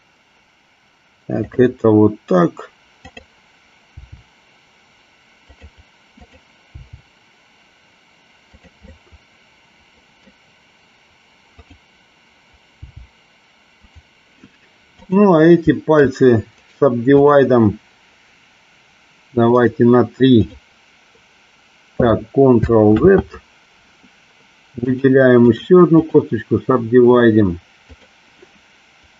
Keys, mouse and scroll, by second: 3.1 click, 4.0 g, 5.4 click, 6.2 click, 6.7 g, 8.6 click, 9.0-10.2 middle drag, 11.7 click, 12.8 g, 15.1 click, 16.6 right click, 19.7 right click, 23.0 ctrl+z, 25.0 click, 25.6 right click.